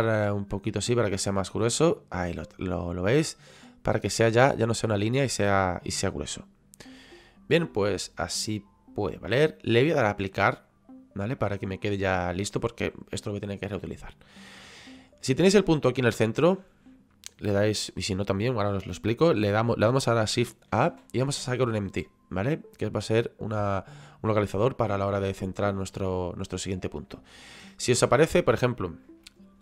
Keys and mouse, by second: 0.0 click, 1.5 click, 5.3 middle click, 10.5 click, 24.5 click, 28.1 click.